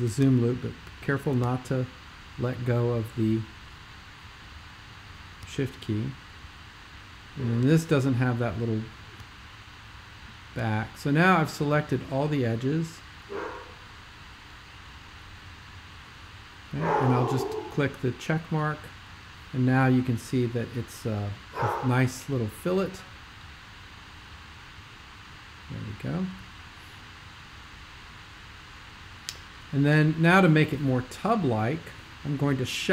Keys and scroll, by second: 0.0-1.2 typing, 3.2-4.0 typing.